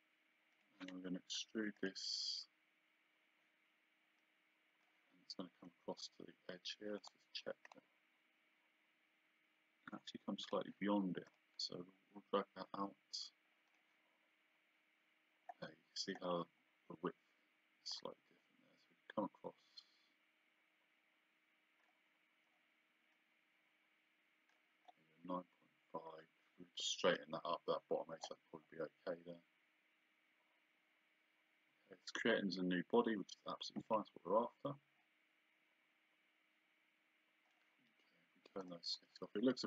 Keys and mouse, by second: 0.5 click, 1.8 click, 4.2 click, 7.0 click, 10.5 click, 13.7 click, 17.9 click, 23.2 click, 33.9 click, 35.0 click, 38.6 click.